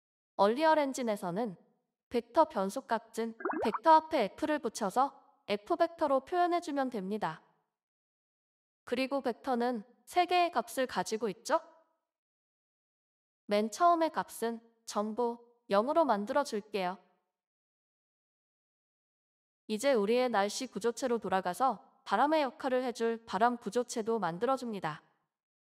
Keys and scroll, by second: 3.1-4.4 typing.